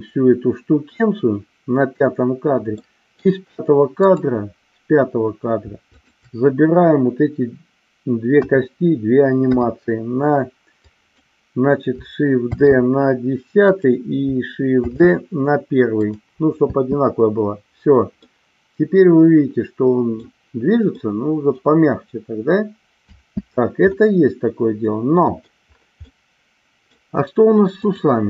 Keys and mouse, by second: 2.8-3.1 middle drag, 4.0-5.0 drag, 6.0-6.9 shift+drag, 8.3 KP_1, 9.4 KP_3, 10.9 click, 12.5 shift+d, 13.6 click, 14.9 shift+d, 16.6 space, 18.2-20.2 middle drag, 21.0-21.7 middle drag, 23.1 space, 23.9-25.5 middle drag, 26.1-26.8 middle drag, 27.7 click.